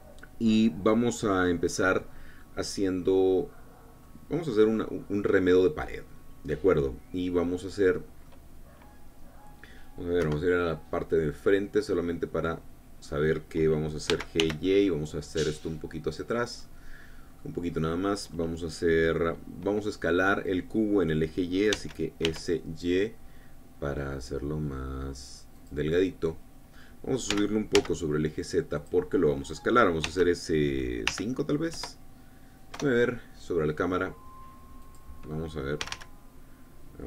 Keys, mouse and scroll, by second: 5.4-9.0 drag, 9.9 scroll down 1, 10.8 KP_1, 11.9-13.8 drag, 14.7 g, 15.0 y, 16.8 click, 17.2-18.2 middle drag, 18.2-18.6 scroll up 1, 18.9 middle click, 22.4 s, 22.8 y, 26.1 click, 26.5-27.6 middle drag, 27.9 g, 28.4 z, 29.4 click, 30.6 s, 31.7 5, 32.3 KP_Enter, 33.3 KP_0, 35.6 click, 36.4 g.